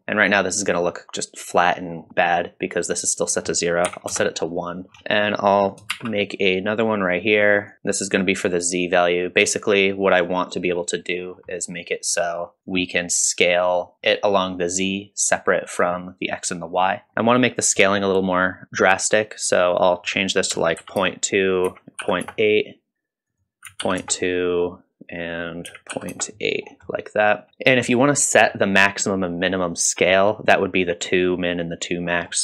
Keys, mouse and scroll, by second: 1.0-1.9 middle drag, 2.1 middle click, 2.1 scroll up 1, 3.3 click, 3.9 click, 4.9 scroll down 1, 4.9 middle drag, 5.6 click, 5.9 shift+d, 7.9 middle click, 8.5-9.7 drag, 10.0 middle click, 10.6 middle click, 11.2-11.5 scroll up 2, 11.5 middle click, 12.2 middle click, 12.4 scroll down 2, 12.7-13.9 drag, 14.0-15.6 scroll up 2, 17.1-17.7 scroll up 1, 17.7-18.6 drag, 19.8-21.2 drag, 21.5 click, 23.3 click, 24.5 scroll down 2, 25.3-26.3 drag, 26.6-26.9 scroll up 2, 26.9 middle click, 27.6 scroll down 2, 27.9-28.4 middle drag, 32.1 scroll up 1.